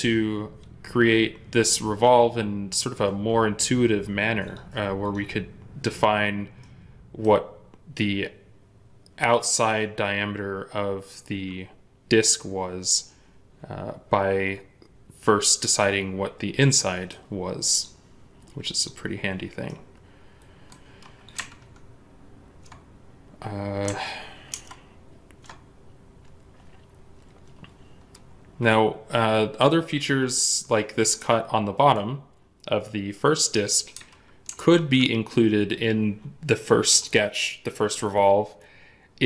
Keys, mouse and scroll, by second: 6.5 middle click, 16.5 middle click, 18.7 double click, 19.5 middle click, 24.4 ctrl+Tab, 31.0 middle click, 31.9-33.9 scroll up 1, 34.3 ctrl+Tab.